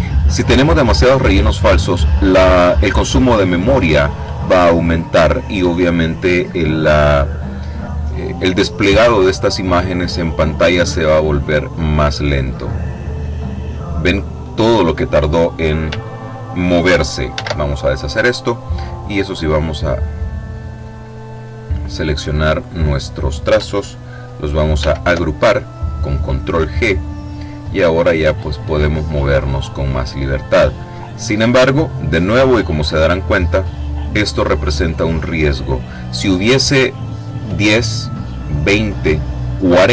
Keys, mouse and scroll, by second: 8.8-12.1 drag, 12.1-15.3 middle drag, 16.8 ctrl+z, 18.7-21.2 drag, 24.2 ctrl+g, 26.7-36.8 drag.